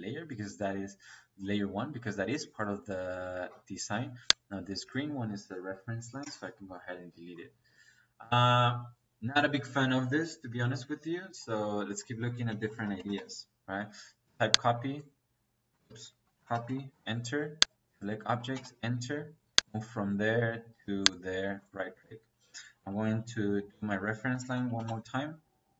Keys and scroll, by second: 6.1 Delete, 12.0 Escape, 12.4-14.2 typing, 15.6 Escape, 16.2-16.8 typing, 18.4 space, 22.3 Escape, 24.2-24.9 typing.